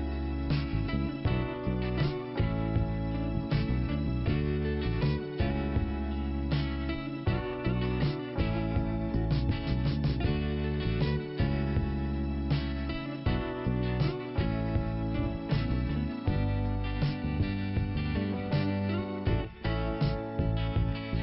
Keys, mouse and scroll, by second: 0.0-2.0 scroll down 2.